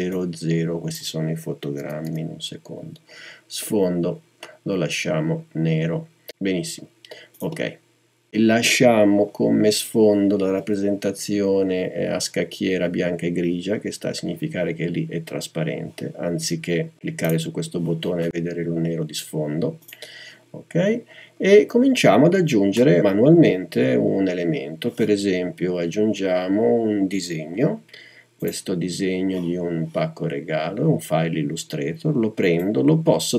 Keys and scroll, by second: 0.0-0.1 typing, 1.8 typing.